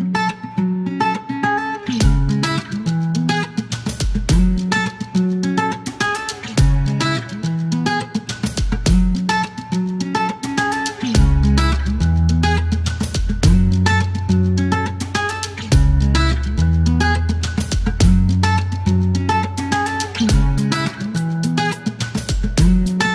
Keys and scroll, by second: 1.2 alt+e, 1.9 space, 3.6 typing, 4.8 typing, 7.3 typing, 11.6-13.0 typing, 14.8-15.8 typing, 14.9 Return, 16.8-18.5 typing, 16.9 Return, 20.8 typing, 22.3 KP_Subtract, 22.4 KP_Decimal, 22.5 KP_3, 22.5 Return.